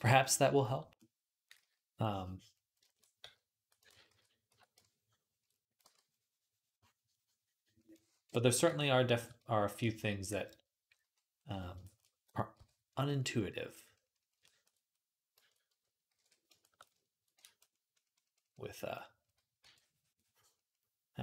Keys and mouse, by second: 1.0-3.5 drag, 1.4 d, 3.1 v, 3.8 ctrl+z, 4.0 ctrl+z, 4.3 x, 5.7 v, 7.3-9.7 drag, 10.0 click, 10.8 KP_3, 11.7-14.5 shift+drag, 11.7-14.5 shift+middle drag, 11.7-14.5 shift+right drag, 12.4 j, 16.0 alt+q, 16.7-21.2 ctrl+drag, 16.7-20.7 ctrl+middle drag, 16.7-21.2 ctrl+right drag, 19.4 d.